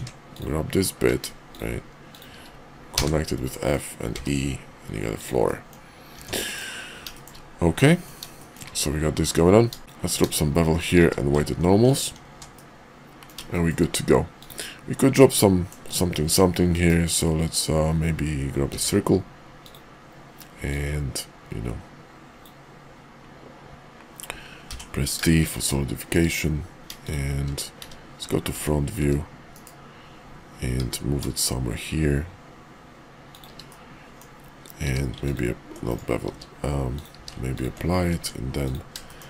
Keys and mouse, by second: 2.0 shift+click, 2.9 f, 3.5 middle click, 4.1 e, 5.4 middle click, 6.1 Tab, 6.4 KP_5, 7.1 shift+middle click, 7.8 middle click, 8.3 shift+middle click, 8.8 middle click, 9.8 q, 11.0 q, 12.5 click, 13.5 shift+click, 14.3 click, 15.4 middle click, 16.7 shift+v, 18.6 d, 20.6-25.6 drag, 28.4 `, 29.0 `, 29.5 KP_5, 30.7 g, 33.7 middle click, 34.8 q, 36.2 q, 36.8 click, 37.1 q, 38.2 Tab, 39.0 shift+click.